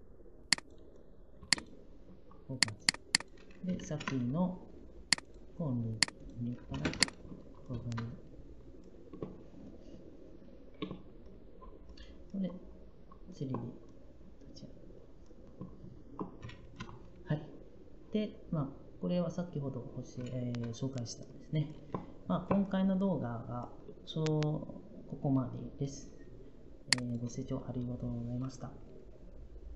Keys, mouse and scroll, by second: 6.6 Escape.